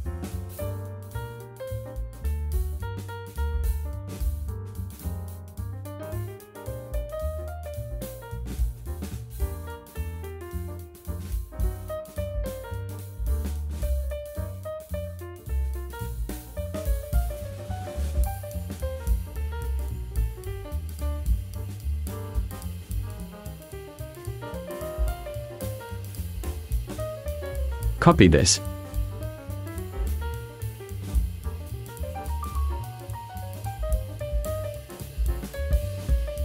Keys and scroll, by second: 0.5 ,, 0.9 6, 9.9 v, 24.8 v.